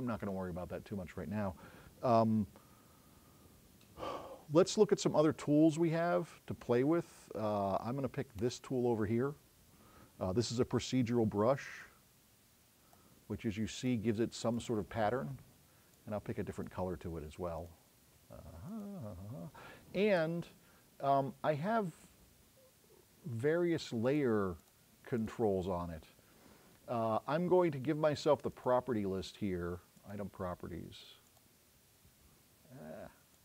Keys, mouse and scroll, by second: 0.2 click, 8.4 click, 11.8-13.0 drag, 24.6 click, 25.2 click.